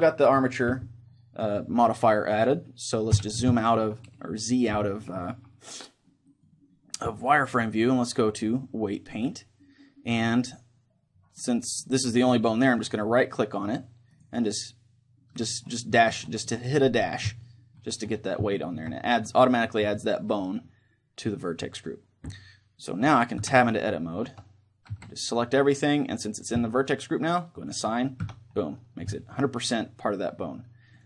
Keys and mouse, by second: 2.0-7.9 middle drag, 3.1 z, 7.9-10.2 drag, 12.9-14.1 right drag, 14.1-15.3 middle drag, 15.3-18.3 drag, 18.3-20.3 middle drag, 23.9 Tab, 24.3 Tab, 24.9 a, 27.6-30.2 drag, 28.3 Tab, 29.1 middle click, 30.2 middle click.